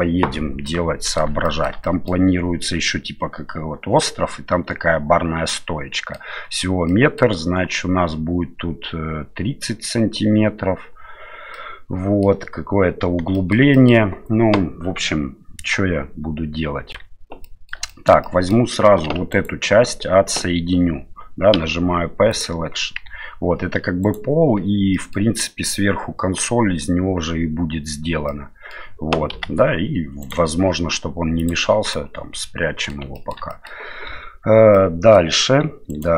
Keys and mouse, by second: 0.7-1.2 middle drag, 1.4 shift+middle drag, 1.8 middle drag, 5.5-6.2 middle drag, 6.9-7.2 middle drag, 11.5-12.2 middle drag, 13.3 shift+middle drag, 13.7 middle drag, 16.8 Tab, 17.4 middle click, 17.9 shift+middle click, 18.2 middle click, 19.0 3, 19.3 right click, 21.5 p, 23.0 Tab, 24.0 right click, 24.9 middle click, 28.3-28.7 middle drag, 29.3 g, 31.4 click, 31.9-32.9 middle drag, 33.1 shift+middle drag, 33.5 middle click, 34.1 Tab, 34.7 middle click, 35.9 right click.